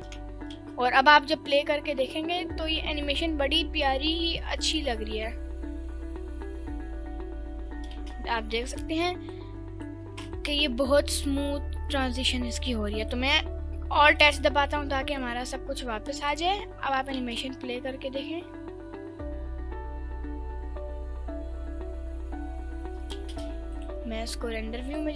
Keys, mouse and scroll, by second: 0.5 space, 8.0 space, 8.7 drag, 9.4-9.9 drag, 10.5 ctrl+s, 11.3-12.1 scroll down 3, 12.6 click, 12.9 scroll up 1, 13.0 middle click, 13.9 alt+h, 14.3 scroll up 1, 14.5 middle drag, 15.1 click, 16.2 click, 16.8-17.1 scroll down 2, 17.1 space, 23.2 space, 23.7 click.